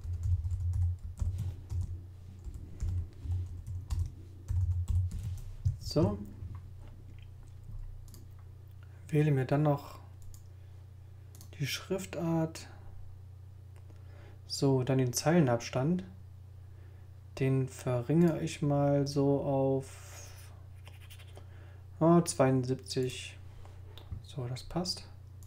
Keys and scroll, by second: 0.0-5.6 typing, 1.7 shift+Return, 5.8 shift+super+s, 6.0 shift+super+a.